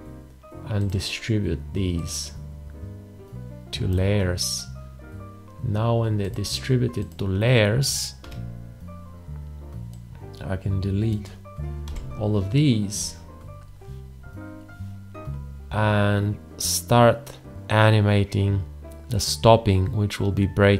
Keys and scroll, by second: 8.2 x, 11.8 Delete.